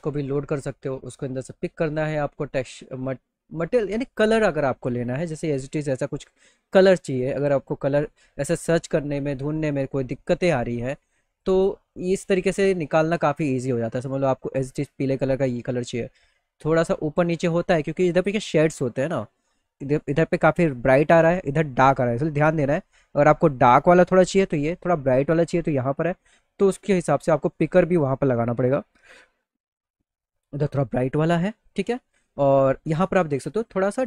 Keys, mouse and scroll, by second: 1.2 click, 2.2 click, 9.6 click, 10.6 click, 11.9 click, 12.1 click, 13.5 click, 14.7 click, 17.7 middle click, 17.8 middle click, 26.7 click, 26.7 right click, 27.1 click, 28.4 click, 32.0 click, 33.5 click.